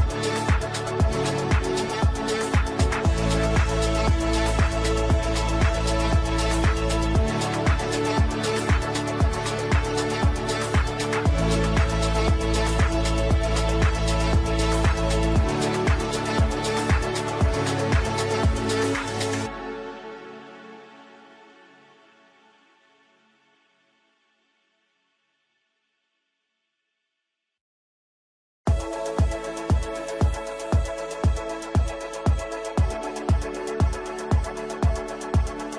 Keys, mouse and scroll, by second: 2.6 F3, 3.2 click, 4.2 F2, 4.4 click, 5.5 F2, 5.7-8.6 drag, 8.6 right click, 10.5 right click, 13.1 right click, 14.2 click, 15.4 right click, 16.5 click, 18.6 right click, 20.5 click, 22.2-25.7 shift+drag, 25.7 right click, 27.1 click, 27.9 ctrl+u, 28.6-30.4 alt+drag, 30.4-31.7 right drag, 32.1 shift+click, 32.6 c, 33.0-35.7 drag.